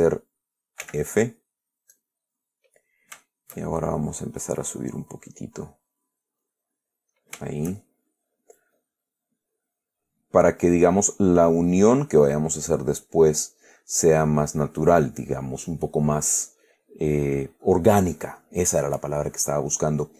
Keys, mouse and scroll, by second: 0.1 g, 1.1 f, 2.2 click, 2.6 click, 3.5-4.6 shift+drag, 5.1 click, 6.7-8.6 drag, 9.1-10.6 drag, 11.5-12.6 drag, 19.3 click.